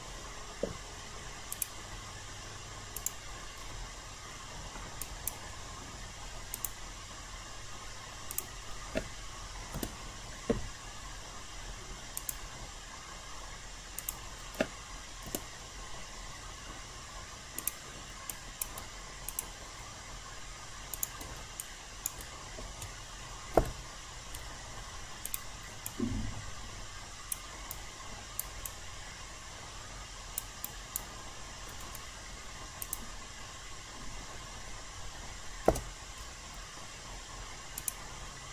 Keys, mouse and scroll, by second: 1.5 click, 4.4 alt+middle click, 5.0 alt+click, 6.5 click, 9.7 Return, 12.2-15.0 drag, 15.2 Return, 17.6 click, 18.3 alt+click, 19.2 click, 20.9 shift+click, 21.6 alt+click, 25.2 click, 25.8-27.3 alt+drag, 27.7 alt+right click, 28.6-30.4 alt+drag, 30.6 alt+right click, 31.3 alt+middle click, 32.8 click, 35.6 BackSpace, 37.8 click.